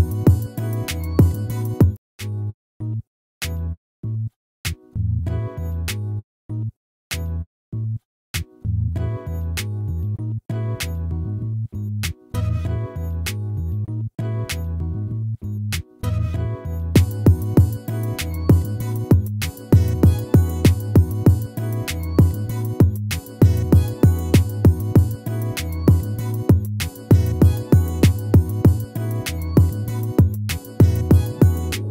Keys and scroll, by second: 22.5 ctrl+-.